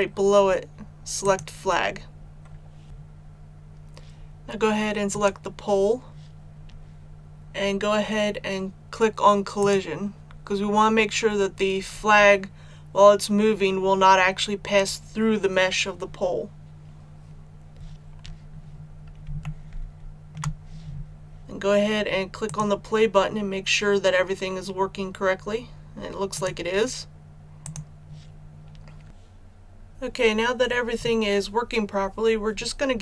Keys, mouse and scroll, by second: 5.1 right click, 9.6 click, 18.5 scroll down 1, 19.4 shift+middle click, 22.4 click.